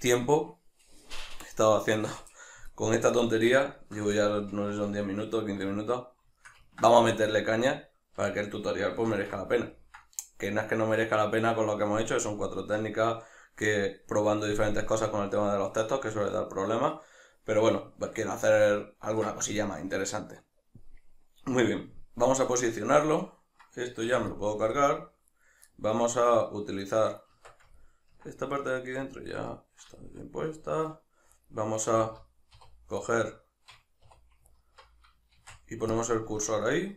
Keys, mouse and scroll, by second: 3.1 middle click, 4.1-11.8 ctrl+middle drag, 9.1 alt+q, 11.8 right click, 15.4-23.2 ctrl+middle drag, 23.2 right click, 24.0 x, 25.3 right click, 25.7-26.8 middle drag, 26.8 right click, 27.4 Tab, 27.8-31.4 ctrl+middle drag, 31.4 alt+right click, 33.0 right click, 34.1 2, 34.5 alt+right click, 35.3 shift+s, 36.3 Tab.